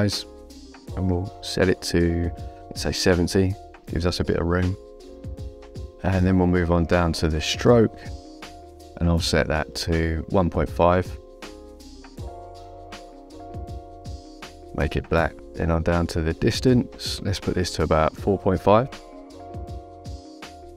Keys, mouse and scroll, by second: 2.3 click, 3.4 KP_7, 3.5 KP_0, 4.1 Return, 4.1 KP_Enter, 5.9 click, 7.7 click, 8.7 KP_1, 9.0 KP_Decimal, 9.2 KP_5, 10.0 Return, 10.0 KP_Enter, 11.4 click, 13.8 click, 15.9 click, 19.7 Return, 19.7 KP_Enter.